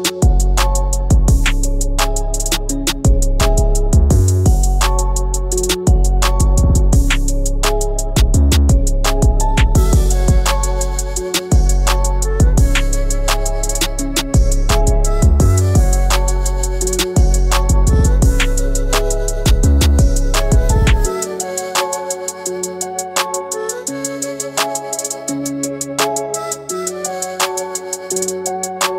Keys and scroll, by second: 22.2 ctrl+g, 23.1 ctrl+alt+g.